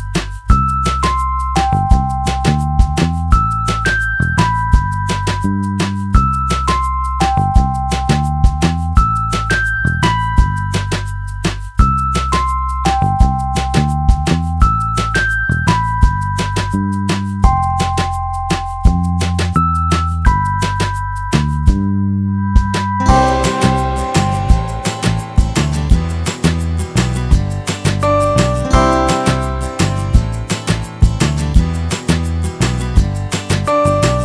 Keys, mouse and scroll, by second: 2.7 middle click, 2.7 n, 3.4 n, 5.8 n, 5.8 t, 8.7 middle click, 10.3 right click, 12.3 x, 15.2 shift+a, 17.4 Tab, 18.2 z, 19.9 click, 20.7 click, 20.7 right click, 21.7 ctrl+r, 28.6-30.3 drag, 30.3 middle click, 30.4 click, 30.4 g, 30.6-31.5 right drag, 32.3 right click, 32.5-34.2 right drag, 33.4 g.